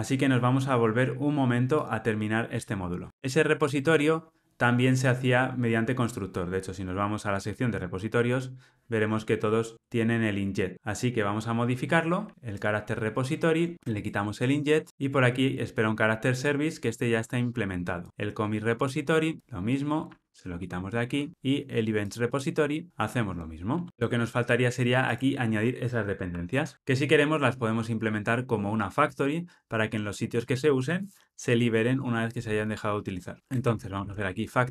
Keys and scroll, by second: 14.9 ctrl+alt+o, 21.0 ctrl+alt+o.